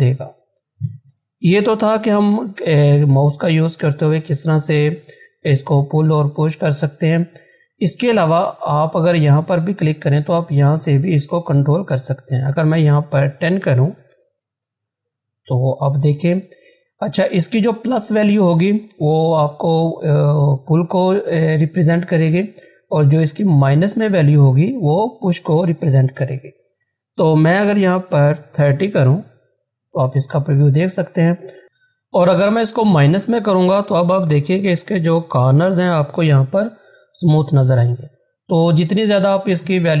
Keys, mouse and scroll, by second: 5.5 ctrl+z, 8.7 click, 11.7 click, 13.0-14.2 typing, 26.7 Return, 26.8 click, 27.9-29.0 typing, 30.9 click, 32.9-34.3 drag, 34.3 -, 35.3-36.2 typing, 39.4-40.0 drag.